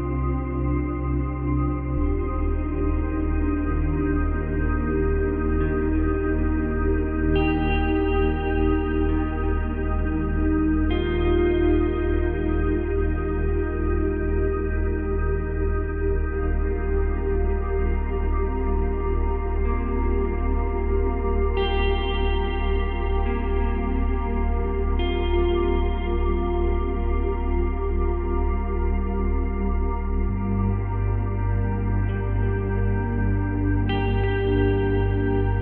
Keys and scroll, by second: 0.8 space, 14.6 Delete, 15.9 space, 18.7 space, 21.7 space, 24.0 space, 29.1 space, 31.0 space, 33.7 ctrl+c, 33.8 ctrl+v.